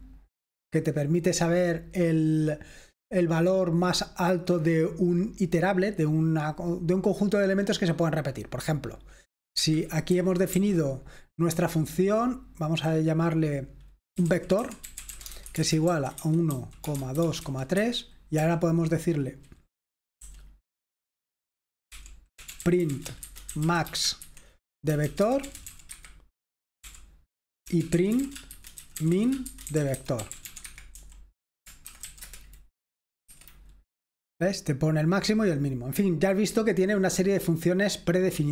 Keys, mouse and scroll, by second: 9.6 Escape, 9.9-11.0 typing, 14.0-18.4 typing, 20.3 u, 21.8-32.4 typing, 33.3 F5.